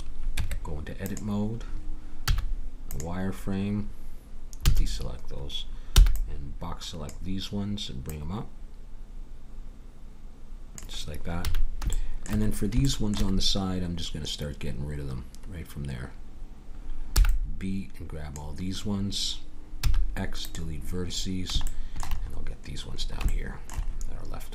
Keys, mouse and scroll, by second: 0.3 Tab, 2.2 z, 4.6 a, 6.0 b, 8.0-9.8 drag, 11.4 a, 11.9 middle click, 17.1 b, 19.8 x.